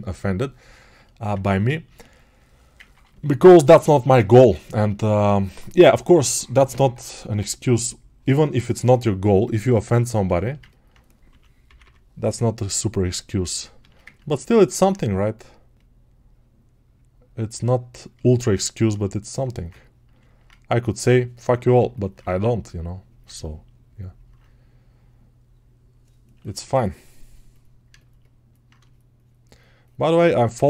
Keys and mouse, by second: 2.6-10.2 ctrl+alt+drag, 18.1-30.6 shift+drag.